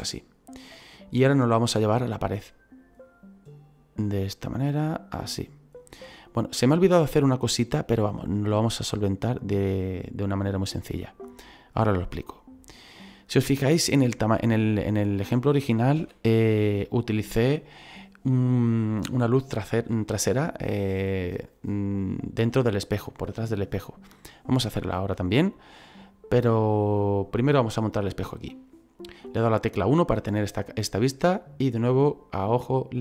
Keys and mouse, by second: 1.2 click, 2.5 click, 6.3 middle click, 8.6 click, 14.2 middle click, 16.0 KP_1, 30.6 click.